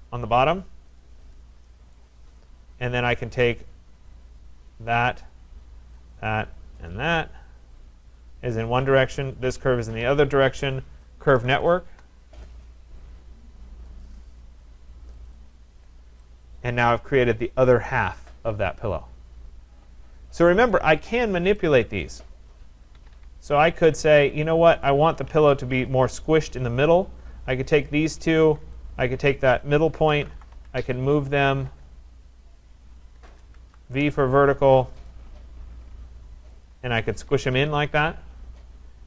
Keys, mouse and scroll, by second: 1.0 click, 1.9 right click, 2.2-3.3 scroll, 3.3 click, 4.4 click, 6.1 shift+click, 6.9 click, 8.2 click, 9.4 click, 11.1-12.0 typing, 14.0 click, 15.3 click, 15.5 click, 15.9 scroll, 20.7 right click, 21.1-21.5 scroll, 22.0 right click, 22.9 Escape, 23.1 Escape, 23.3-24.1 scroll, 24.3 click, 25.3 Delete, 26.6 click, 27.9 shift+click, 29.3 click, 29.9-30.8 typing, 31.7 Return, 32.3 Return, 33.3 BackSpace, 33.6 v, 33.8 Return, 35.1 click, 36.7 click, 37.2 Escape, 37.4 Escape, 37.5 Escape.